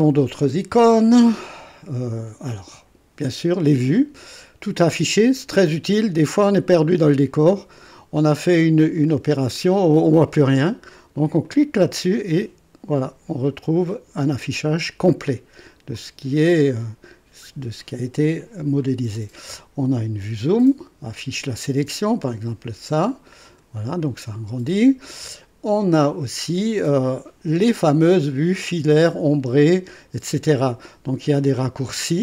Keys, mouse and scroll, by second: 7.3-9.8 drag, 9.0 right click, 11.4 click, 13.0-14.3 drag, 14.4 click, 15.2 right click, 16.0-17.3 drag, 16.7-17.3 right drag, 22.2 click, 23.4 click, 26.2 click.